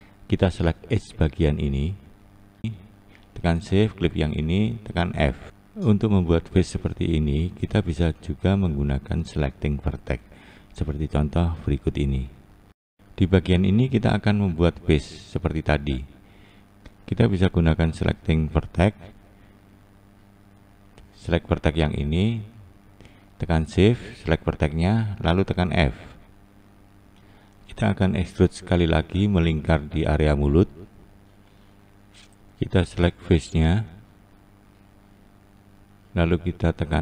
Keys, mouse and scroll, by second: 0.4 2, 1.5 click, 2.7 click, 3.6 shift+click, 4.7 f, 7.2 1, 9.6 click, 10.4 click, 11.5 click, 11.9 click, 18.9-19.5 scroll down 2, 19.5-20.7 scroll up 1, 22.2 shift+click, 23.1 shift+click, 24.1 shift+Left, 25.4 f, 26.0 scroll down 1, 26.0-26.9 scroll up 4, 26.9-27.2 scroll down 2, 27.2 Left, 28.0 2, 28.8 Left, 30.5 shift+Left, 35.5 shift+Left, 36.5 e.